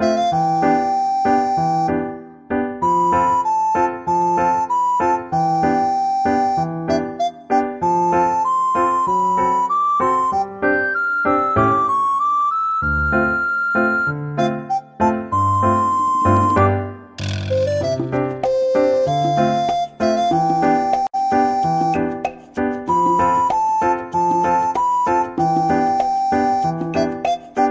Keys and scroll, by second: 0.3 ctrl+z, 0.4 ctrl+z, 0.6 ctrl+z, 3.6 ctrl+z, 13.6 ctrl+x, 14.1 Delete, 14.3 ctrl+v, 16.1 Tab, 17.1-17.9 typing, 22.0 ctrl+z.